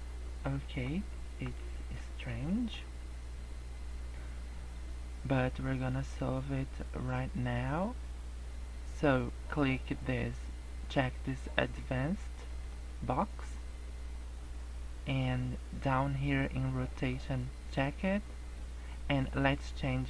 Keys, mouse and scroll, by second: 0.5 scroll down 2, 0.9 scroll up 1, 1.9 shift+middle click, 2.5 middle click, 2.9 scroll down 1, 3.2 scroll up 1, 4.5-5.0 scroll up 5, 5.7 scroll down 3, 6.5-7.2 scroll up 1, 7.2-8.8 scroll up 5, 12.6 click, 13.3 scroll down 2, 13.9-14.7 scroll down 5, 15.1-15.6 scroll down 2, 17.1 click.